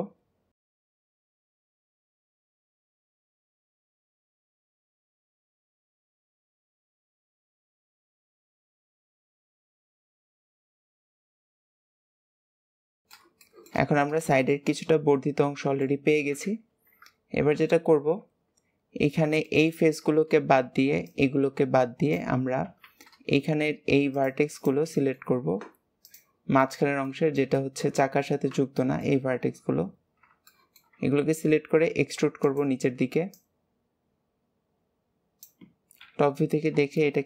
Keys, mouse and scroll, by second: 0.5 click, 1.0 shift+middle click, 1.3 click, 1.3-4.5 typing, 1.8 shift+middle click, 2.1 click, 2.5 shift+middle click, 2.7 click, 3.1 shift+middle click, 3.3 scroll down 1, 3.4 shift+middle click, 3.5 scroll up 1, 3.7 click, 4.1 shift+middle click, 4.4 click, 5.1 shift+scroll up 1, 5.2 shift+middle click, 5.9 click, 6.0-8.7 typing, 6.5 click, 7.0 shift+middle click, 7.4 shift+middle click, 7.8 click, 8.2 shift+middle click, 8.5 click, 9.2 click, 9.8 shift+middle click, 10.2 click, 10.4 click, 11.1 shift+middle click, 11.3 scroll up 2, 11.5 click, 11.8 click, 12.2 scroll down 1, 12.4 middle click, 12.6 alt+z, 12.7-13.8 shift+middle drag, 13.8 scroll down 1, 14.3-16.2 shift+middle drag, 16.2 KP_1, 16.7 alt+z, 17.5 KP_3, 17.8 alt+z, 18.5 scroll up 2, 19.1 scroll down 1, 19.4 shift+middle click, 19.9-20.4 scroll up 1, 24.1 click, 24.5 shift+click, 24.9-26.0 shift+middle drag, 26.0 shift+click, 26.5 shift+click, 26.9-31.1 shift+middle drag, 31.1-31.7 scroll up 1, 31.7 e, 33.2 click, 35.9 KP_7, 36.9 shift+middle click.